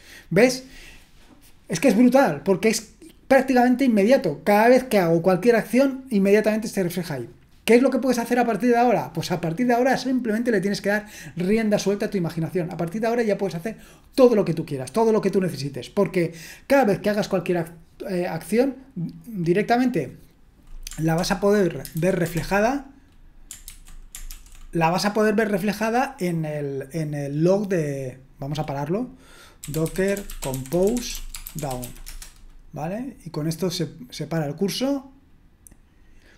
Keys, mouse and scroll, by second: 21.1 ctrl+l, 22.0 super+h, 22.3 ctrl+l, 23.6 ctrl+c, 24.3 ctrl+l, 29.3-32.3 typing.